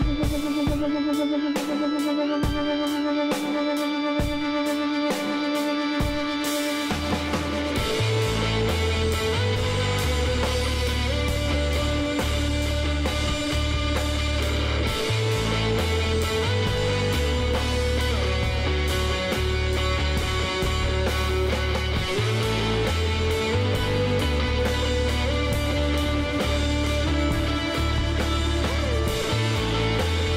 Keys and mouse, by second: 0.7-2.8 drag, 3.2-4.9 middle drag, 4.6 KP_Divide, 5.4 Tab, 6.5 z, 7.0 a, 8.3 middle click, 9.0 Tab, 10.7 middle click, 11.5 KP_1, 11.6 click, 11.9 z, 12.5-14.7 drag, 14.3 Tab, 15.2 z, 17.1 middle click, 19.4 middle click, 21.1-24.6 middle drag, 25.3-28.0 middle drag, 27.3 KP_Divide.